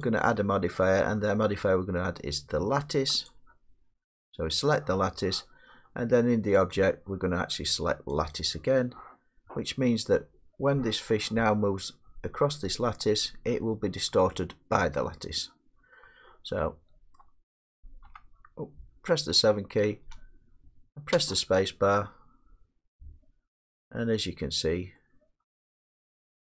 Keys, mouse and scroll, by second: 0.2 click, 3.3 click, 6.7 click, 8.3 click, 10.7 middle click, 15.0-15.8 middle drag, 15.9-17.2 middle drag, 18.0 7, 21.1 space, 22.4 middle click, 22.4 middle click, 25.9 middle click.